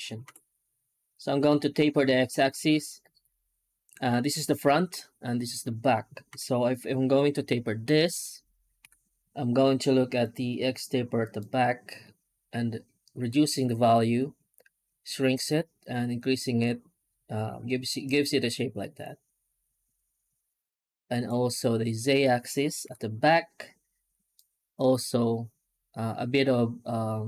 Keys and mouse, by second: 0.1 F9, 6.2 F9, 8.7 F9, 21.4 middle click, 22.7 F9.